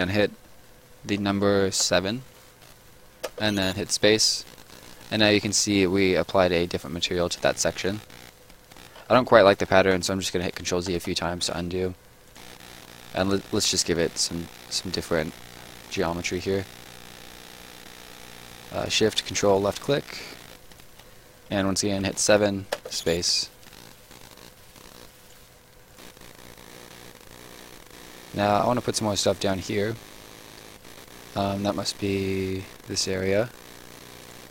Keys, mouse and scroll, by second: 1.8 7, 3.2 space, 4.5 right click, 8.5 scroll up 1, 9.1-9.5 ctrl+scroll up 1, 9.5 ctrl+z, 12.2 click, 14.1 shift+click, 19.5 ctrl+shift+click, 19.7 shift+click, 20.3 Escape, 20.6 click, 21.9 7, 22.7 space, 23.6 right click, 25.9 click, 26.8 click, 27.6 click, 34.2 click.